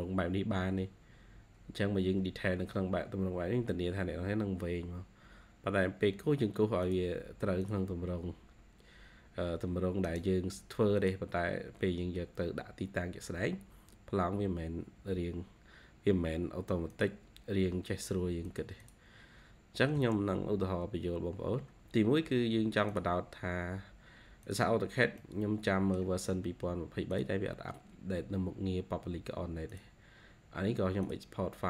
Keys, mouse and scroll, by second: 10.0 right click, 11.5-11.9 scroll up 2, 18.7 double click, 19.7 e, 24.8-25.1 scroll down 2, 25.1 middle click.